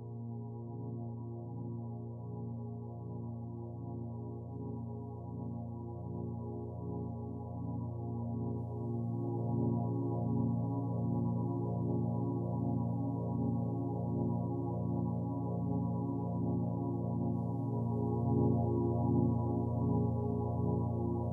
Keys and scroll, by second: 6.1 ctrl+t.